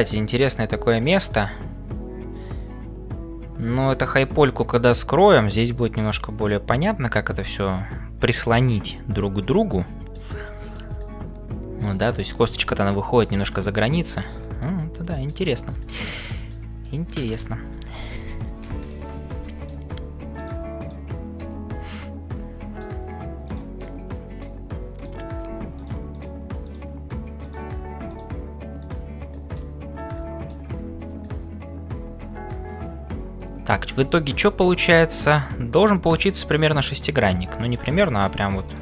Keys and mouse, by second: 0.0-38.8 typing, 8.9-10.1 middle drag, 10.4 shift+middle click, 10.9-12.0 middle drag, 12.2 shift+middle click, 14.0 shift+middle click, 14.4 middle click, 15.8 shift+middle click, 16.2 middle click, 17.7 middle click, 19.6 middle click, 22.1 middle click, 23.5 click, 23.9 middle click, 26.7 click, 28.1 click, 29.4 middle click, 30.1 middle click, 31.3-36.2 middle drag, 37.2 click.